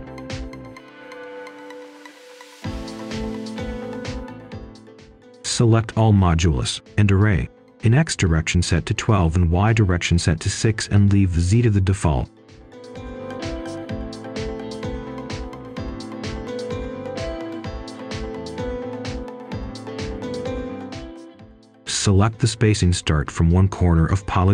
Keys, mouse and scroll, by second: 2.7 shift+click, 3.2 shift+click, 3.6 shift+click, 4.2 shift+click, 4.7-5.0 scroll up 1, 5.0 right click, 7.2 Return, 9.1 Escape, 10.2 right click, 12.3-13.3 typing, 13.5 Return, 14.3 6, 14.6 Return, 20.4-21.3 scroll up 1, 21.9 click, 22.3-24.5 scroll down 1.